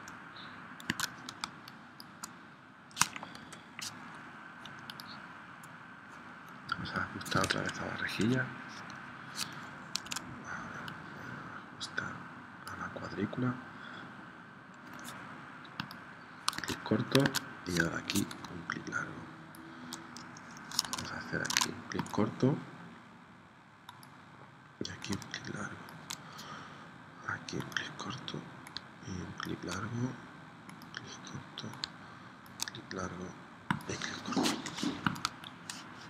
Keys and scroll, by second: 0.9 super+Tab, 1.4 space, 3.4 p, 7.6 Escape, 10.0 super+z, 16.6 super+Tab, 17.2 super+Tab, 20.8 super+Tab, 21.5 super+Tab, 34.8 v, 35.2 space.